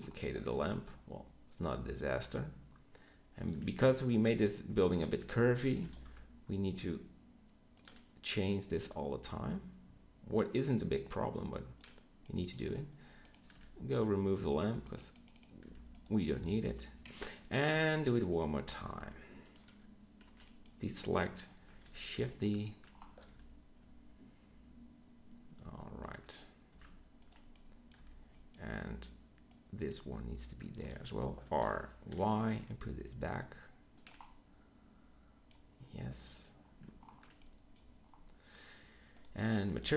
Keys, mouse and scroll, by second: 0.5 g, 3.6 click, 4.0 z, 5.1 r, 12.4 middle drag, 13.4 x, 15.6 x, 17.0 KP_3, 17.6 z, 18.8 b, 20.3 b, 21.7 shift+d, 23.2 g, 26.6 s, 27.9 z, 28.3 click, 30.1 z, 31.4 r, 39.8-39.9 middle drag.